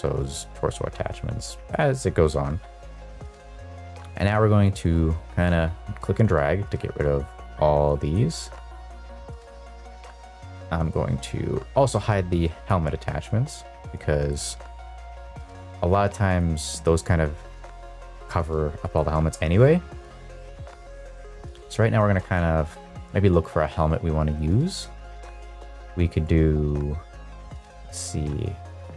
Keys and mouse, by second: 4.6 click, 9.1 click, 10.3-10.8 drag, 12.0 click, 13.7 click, 14.6 shift+middle drag, 15.1 shift+middle drag, 16.3 click, 17.0 click, 18.8 click.